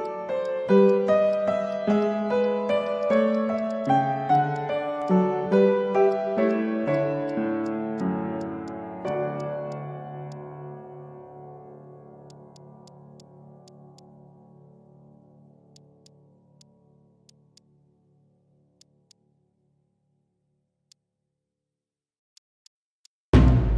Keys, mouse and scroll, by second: 0.0 Tab, 0.3 Tab, 0.8 Tab, 1.2 Tab, 1.6 Tab, 2.3 Tab, 2.8 alt+click, 3.5 alt+click, 3.6 alt+click, 3.8 alt+click, 4.3 alt+click, 4.5 alt+click, 5.0 Tab, 5.4 Tab, 6.5 Tab, 7.2 Tab, 8.0 Tab, 8.6 Tab, 9.4 alt+click, 9.5 alt+middle click, 10.3 alt+click, 11.1 Tab, 14.4 ctrl+z, 14.5-14.9 ctrl+z, 18.8 shift+click, 20.8 Tab, 22.3 Tab, 22.5 Tab, 22.9 Tab, 23.4 Tab.